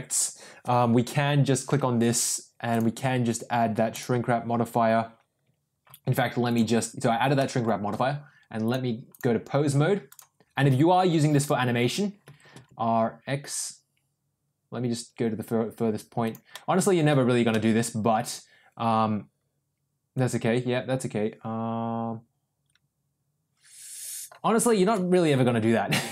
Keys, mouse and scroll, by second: 2.7-4.2 drag, 6.4 click, 7.3 middle drag, 8.6-9.2 drag, 10.7 r, 11.9 ctrl+z, 12.2 r, 16.4 middle click, 17.4-24.3 middle drag, 24.7 r.